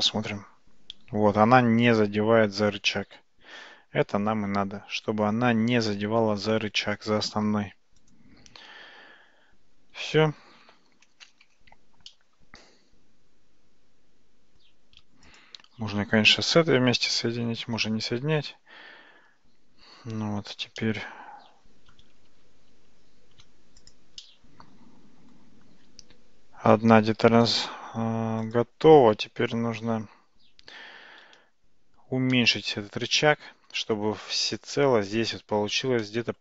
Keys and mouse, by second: 10.7 Tab, 11.5 Tab, 12.2-14.7 middle drag, 15.3 shift+click, 17.4 ctrl+j, 20.8-22.0 middle drag, 22.4 ctrl+z, 22.8 ctrl+z, 23.9 drag, 24.2-25.4 middle drag, 32.4-33.0 shift+middle drag, 33.3-33.8 shift+middle drag, 34.4-34.7 shift+middle drag, 36.1-36.4 shift+middle drag.